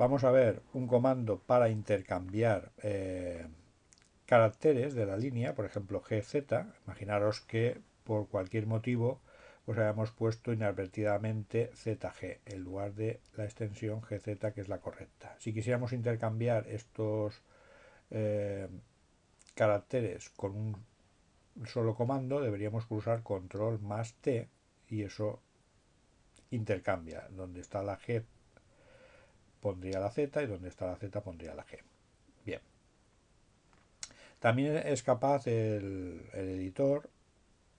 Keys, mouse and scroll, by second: 11.3-12.9 drag, 13.7-14.8 drag, 32.9 click.